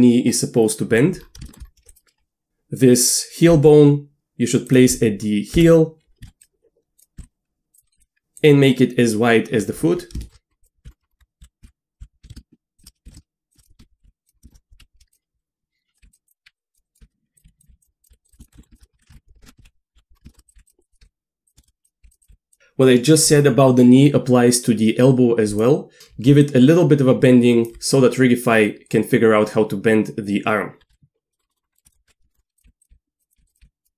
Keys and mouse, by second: 1.5 shift+middle click, 1.9 click, 3.5 g, 5.5 KP_1, 6.2 s, 7.0 click, 7.2 s, 8.0 g, 10.6 click, 10.8-14.8 typing, 11.7 ctrl+z, 14.5 shift+click, 16.0-22.3 typing, 18.6 shift+click, 19.7 alt+r, 20.3 shift+middle click, 21.6 shift+click, 22.2 click, 26.0 ctrl+z, 26.0 d, 26.3 d, 26.4-27.7 drag, 27.6 d, 30.9 q, 31.3 middle click, 31.5 middle click, 31.7 shift+middle click, 32.1-33.9 typing, 32.3 shift+middle click, 32.6 middle click, 33.3 click, 33.5 click.